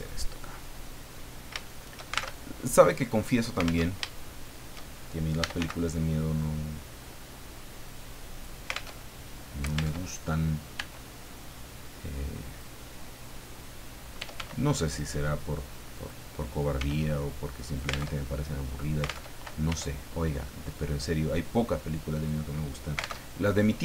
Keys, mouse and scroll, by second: 0.0 click, 0.3 middle click, 1.1-1.4 scroll up 2, 1.6 shift+middle click, 2.3 alt+shift+Tab, 3.9 alt+Tab, 4.3 shift+middle click, 5.1-6.1 typing, 8.3 click, 8.9 alt+Tab, 10.0 alt+Tab, 10.7 e, 12.5 click, 13.9-14.8 typing, 16.0 click, 16.7 s, 17.6 alt+click, 18.1 alt+Tab, 19.3 alt+Tab, 19.7 e, 22.1 click, 23.2 alt+Tab.